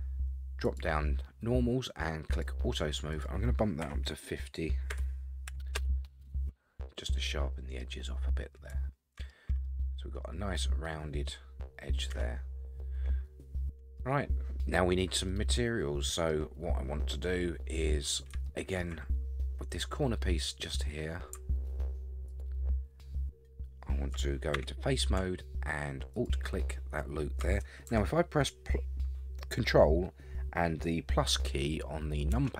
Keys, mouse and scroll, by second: 0.6 click, 2.3 click, 3.1-6.2 drag, 6.7-7.0 scroll down 4, 7.0-7.8 middle drag, 7.8-8.2 scroll up 4, 8.8-9.3 shift+middle drag, 9.6-10.6 middle drag, 12.1 Tab, 12.8-14.0 middle drag, 14.2-15.1 scroll down 1, 15.1 scroll down 1, 15.3-16.3 middle drag, 16.6-18.3 scroll up 5, 18.5 shift+middle click, 22.3 alt+click, 24.5 3, 26.1 alt+click, 32.3 ctrl+KP_Add.